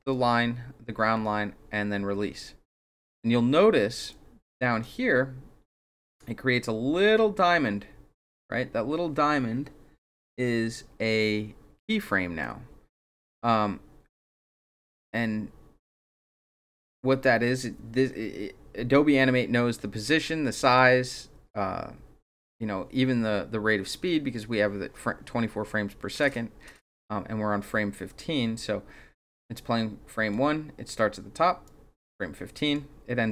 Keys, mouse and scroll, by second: 4.1 click, 12.4-15.8 drag, 20.7-26.9 drag, 28.1-30.3 drag, 31.6-32.7 drag.